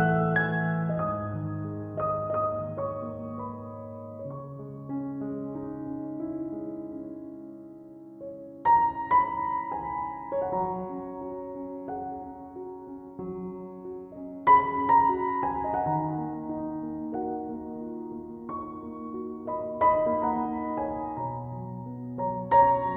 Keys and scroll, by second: 9.4 ctrl+z, 9.9 ctrl+s, 20.3 ctrl+s.